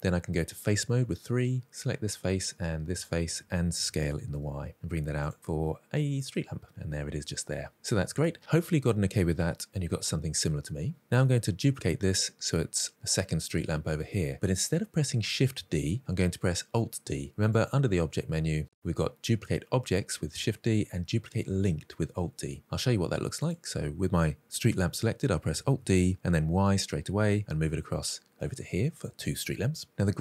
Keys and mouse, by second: 0.5 3, 1.3 click, 1.6 middle click, 2.8 shift+click, 3.6 s, 4.0 y, 5.0 click, 5.2 middle click, 6.2-7.7 middle drag, 8.1 Tab, 8.5-10.9 middle drag, 11.2 middle drag, 17.4-23.3 drag, 25.5 alt+d, 26.0 y, 28.9 click.